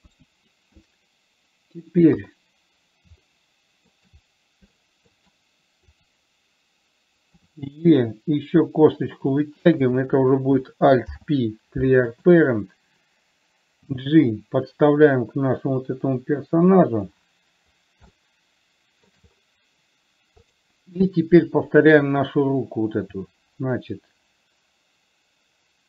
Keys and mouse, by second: 0.4 KP_1, 2.4 KP_3, 3.7 shift+middle click, 5.1 shift+middle click, 6.3 click, 7.7 e, 10.3 click, 11.3 alt+p, 14.2 g, 18.6 shift+middle click, 20.8 click, 23.4 e.